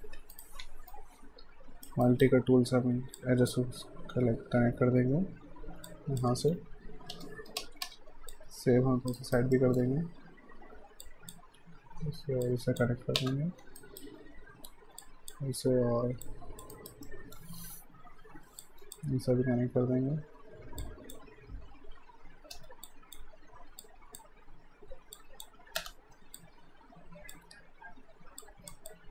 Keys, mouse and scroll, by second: 0.1 q, 0.3 right click, 0.9 shift+right click, 2.1 alt+right click, 3.1 click, 7.1 Return, 7.6 space, 8.3 alt+click, 9.2 alt+right click, 9.5 alt+middle click, 11.1 click, 13.2 Return, 13.8 alt+right click, 15.0 click, 16.2 alt+click, 16.7 alt+right click, 17.1 alt+middle click, 18.6 click, 22.5 Return, 22.9 click, 25.8 Return, 26.4 alt+click, 28.9 alt+click.